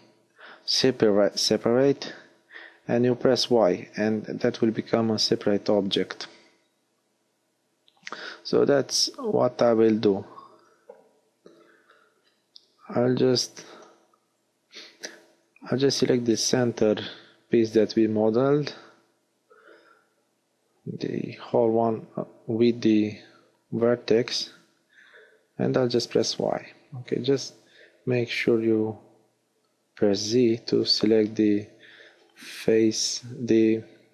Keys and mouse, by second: 3.4 y, 6.2 g, 6.9 middle click, 10.3 ctrl+z, 10.5 ctrl+z, 12.0 ctrl+z, 13.6 ctrl+z, 24.0 KP_1, 25.6 z, 28.1 b, 30.9 z, 31.2-33.2 middle drag.